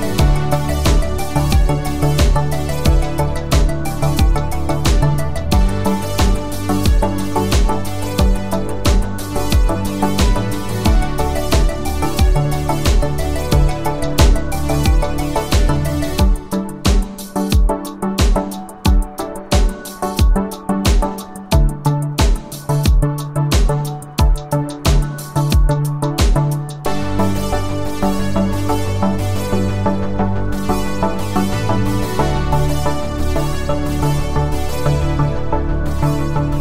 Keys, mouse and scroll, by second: 4.0 click, 4.8 shift+click, 7.2 right click, 9.3 click, 10.6-12.7 typing, 15.0 click, 18.0 click, 27.9 click, 30.3 click, 32.0 click.